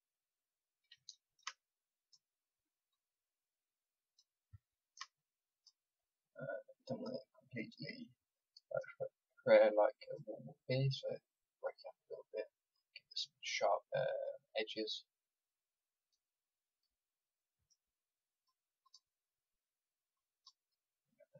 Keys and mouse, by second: 1.5 middle click, 2.0-4.7 drag, 4.7 middle click, 5.5-14.2 drag, 14.2 click, 16.0-20.8 drag, 21.0 click.